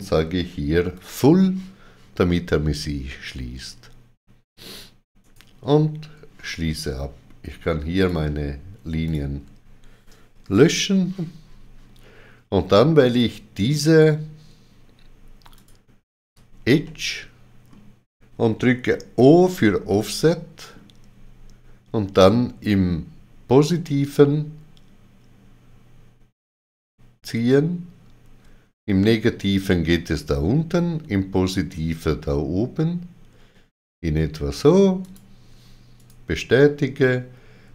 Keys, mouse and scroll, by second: 0.9 click, 3.1 middle click, 5.2 right click, 8.0 click, 8.0 right click, 8.0 middle click, 9.0 shift+click, 13.0 shift+click, 13.8 shift+click, 15.5 alt+click, 16.8 middle click, 19.2 o, 19.9 middle click, 23.7 middle click, 23.7 o, 35.0 shift+click, 36.0 right click.